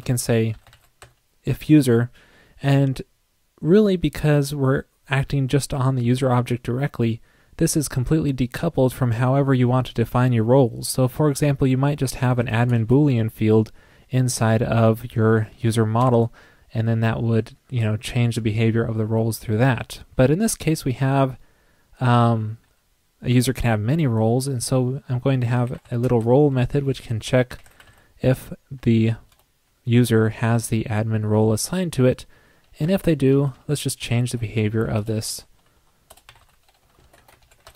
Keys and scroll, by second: 16.1 shift+Left, 33.3 super+Right, 33.5 super+c, 34.0 super+Right, 34.2 super+v, 37.3 super+Right.